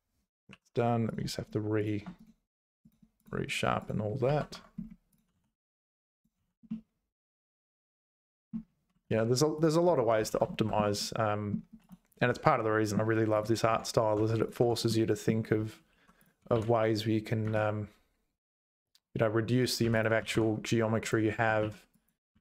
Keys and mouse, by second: 0.5 2, 1.8 shift+click, 4.2 ctrl+s, 4.5 Tab, 5.3 h, 6.1 click, 6.4 h, 6.7-8.5 middle drag, 9.0 ctrl+z, 9.6 click, 10.3 ctrl+s, 10.5 shift+middle click, 11.0 middle click, 11.9 click, 12.2 h, 12.6 middle click, 13.3 click, 13.7 Tab, 14.2 Tab, 14.6 Tab, 14.9 right click, 15.9 2, 16.4 g, 19.8 1, 19.9 click, 20.2 g, 21.6 ctrl+z, 21.9 click, 22.3 g.